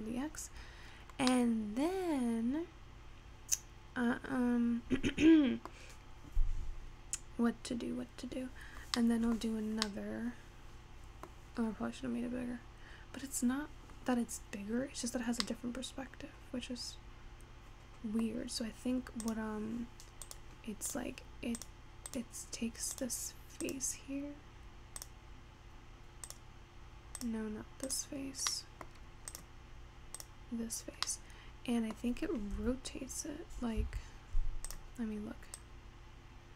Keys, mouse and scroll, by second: 0.5-1.2 scroll down 1, 1.2 scroll down 1, 1.4-4.4 middle drag, 9.0-13.0 middle drag, 14.6-15.6 scroll down 3, 15.6-18.8 middle drag, 18.8-19.5 scroll up 3, 19.5 click, 20.4 click, 21.7 click, 22.2 click, 23.1 click, 23.8 click, 25.2 click, 26.4 click, 27.2 click, 28.0 click, 28.8 middle click, 29.5 click, 30.2 click, 31.5-32.7 middle drag, 32.7 r, 34.7 click, 35.6-36.5 drag.